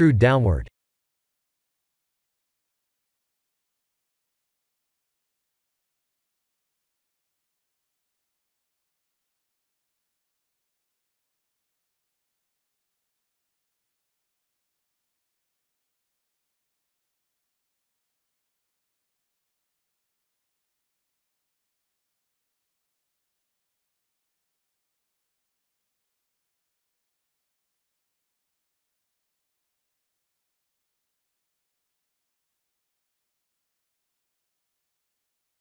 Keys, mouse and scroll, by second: 0.1 r, 1.1 e, 1.9 g, 2.8 r, 4.0 e, 4.7 g, 5.9 r, 8.8 e, 10.0 e, 12.3 r, 13.9 click, 14.6 e, 17.0 ctrl+z, 17.6 e, 18.7 s, 20.9 e, 24.5 Tab, 25.0 middle click, 28.7 middle click, 29.2-29.8 scroll down 5, 29.8 click, 30.1 middle click, 31.1 shift+a, 35.2 s.